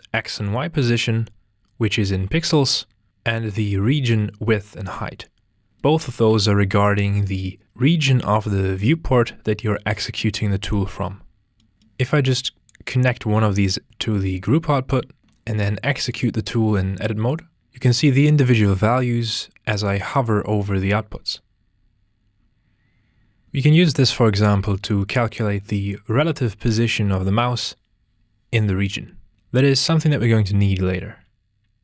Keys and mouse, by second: 6.1 ctrl+space, 12.3-13.1 drag, 15.2 Tab, 16.1-17.4 drag.